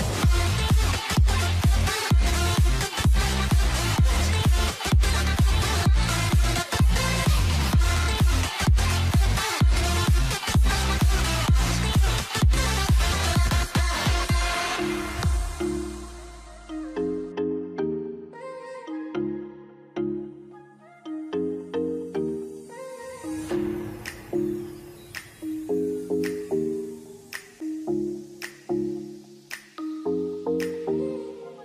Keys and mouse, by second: 1.5-6.5 shift+middle drag, 8.7 k, 13.0 3, 13.2 click, 13.5 shift+click, 14.0 f, 14.6 shift+click, 15.3 alt+a, 15.4 1, 16.0 click, 16.4 x, 18.7 k, 20.6 alt+a, 24.5 click, 27.9 shift+middle click, 28.9 shift+middle click, 30.5 ctrl+s.